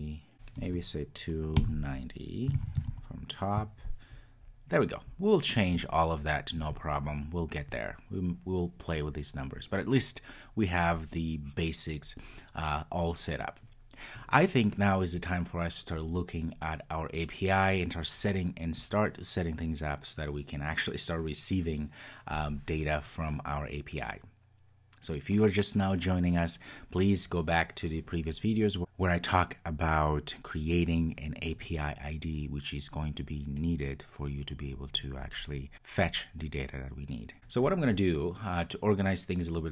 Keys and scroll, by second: 2.6 super+s.